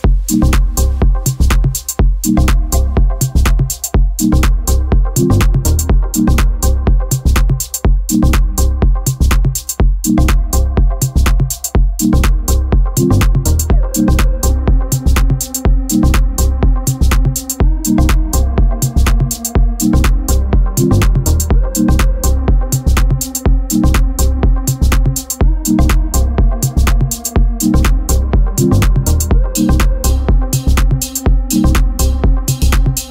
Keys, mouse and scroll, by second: 0.1 g, 0.9-1.5 shift+middle drag, 1.5 scroll down 1, 1.7-2.8 shift+middle drag, 2.8 scroll up 1, 3.2-3.5 shift+middle drag, 3.5 shift+d, 5.5 s, 6.0 g, 7.1 shift+middle drag, 7.3 shift+d, 8.3 s, 8.8 g, 10.1-10.4 scroll down 1, 10.4-11.2 shift+middle drag, 11.2-11.7 scroll down 5, 11.7 shift+middle drag, 11.9-12.4 scroll up 2, 12.4-12.7 shift+middle drag, 12.7-13.3 scroll up 2, 13.3 shift+d, 14.0 r, 14.6 g, 16.2 1, 17.0 1, 17.4 Tab, 18.1 z, 18.5 click, 18.7 b, 19.2 g, 20.9 Tab, 21.2 g, 23.1 Tab, 23.7 Tab, 24.2 shift+d, 25.4 g, 25.7 r, 26.4 g, 28.0 Tab, 28.6 click, 28.8 b, 29.0 g, 30.3 click, 30.4 b, 30.8 g, 31.9 Tab, 32.1-32.5 scroll down 4, 32.5 shift+middle drag, 32.7-33.1 scroll up 3.